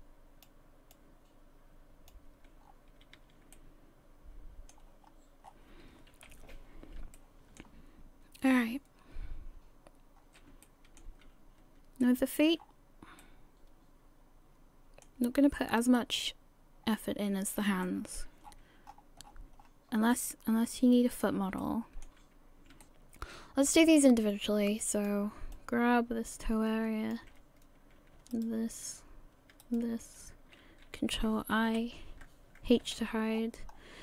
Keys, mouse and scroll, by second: 0.9 click, 2.6-2.9 scroll down 6, 2.9 a, 3.2 a, 3.5 middle click, 5.0 scroll up 2, 5.4-5.8 scroll down 2, 6.1 KP_1, 7.2 shift+middle click, 8.4-9.3 scroll down 2, 10.2-10.5 scroll up 3, 10.6 shift+middle click, 12.0 shift+middle click, 12.6-13.2 scroll up 1, 13.2 middle click, 13.2 scroll up 2, 15.3-15.7 scroll down 5, 16.1 middle click, 17.8 shift+middle click, 18.4-20.1 scroll up 26, 20.1 middle click, 21.6 shift+middle click, 22.8 middle click, 22.9 scroll down 3, 23.7 click, 24.8 click, 25.5 click, 28.3 alt+shift+right click, 29.6 shift+right click, 31.7 ctrl+i, 32.9 h, 33.3-34.0 scroll down 10.